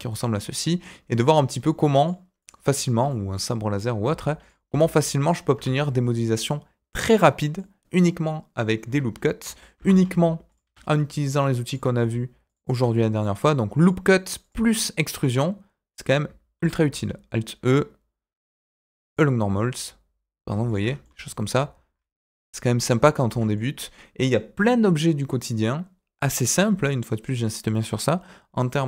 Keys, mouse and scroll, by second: 0.3 middle click, 2.0 click, 2.4 click, 2.6 scroll down 1, 2.8 shift+middle click, 3.0 middle click, 4.0 e, 4.6 s, 5.5 Tab, 5.7-7.5 middle drag, 8.8 Tab, 9.7 ctrl+r, 11.6 click, 12.4 alt+click, 13.1 alt+shift+click, 13.7 alt+shift+click, 14.4 alt+shift+click, 15.1 alt+shift+click, 16.5 alt+e, 20.8 Tab, 21.0-22.8 middle drag, 23.1 shift+middle click, 23.5 middle click.